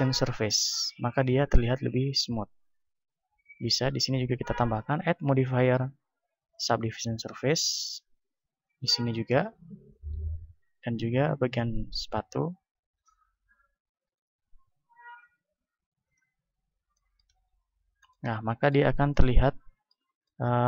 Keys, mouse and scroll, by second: 3.6 right click, 6.6 click, 7.4-8.5 right drag, 10.0 click, 10.8 right click, 13.0-14.2 drag, 14.2 right click, 16.2-17.2 drag, 17.2-20.6 middle drag, 17.5 a.